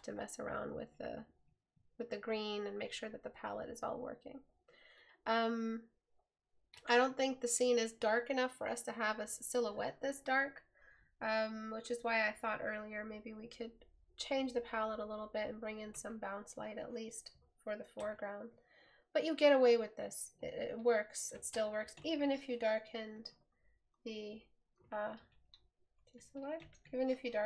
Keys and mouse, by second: 18.2 right click, 25.3 right click.